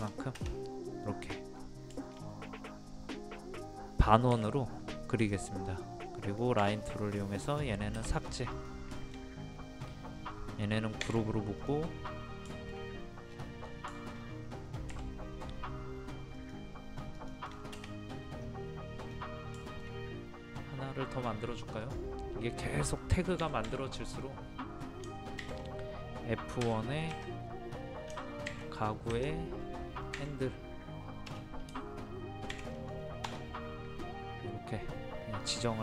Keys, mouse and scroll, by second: 0.9 middle click, 1.2-1.5 scroll up 1, 2.0 shift+middle click, 5.2 click, 7.7-8.1 scroll down 1, 8.2 click, 9.0-10.1 shift+middle drag, 11.0 g, 11.6 click, 12.0 scroll down 1, 12.1 scroll up 1, 12.5 shift+middle click, 13.3 scroll down 1, 13.4 scroll up 1, 13.6 scroll down 1, 14.0 shift+middle click, 14.3-14.6 scroll up 1, 14.9 m, 16.3 click, 17.5 scroll down 1, 19.0 middle click, 19.1-19.6 scroll down 1, 19.7 shift+middle click, 21.8 click, 23.4 1, 26.6 KP_1, 30.2 h, 31.3 BackSpace, 33.3 Return.